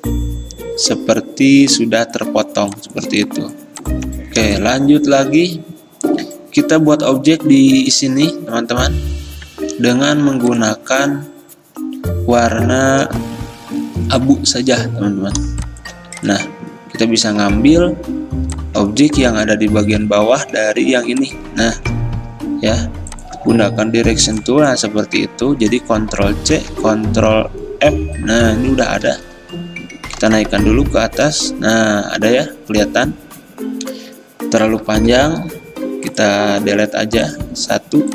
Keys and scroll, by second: 19.3 ctrl+z, 20.0 a, 25.1 ctrl+z, 26.6 ctrl+c, 27.9 ctrl+f, 29.2 x, 30.3-31.1 Up, 31.2 Up, 31.4-34.2 Up.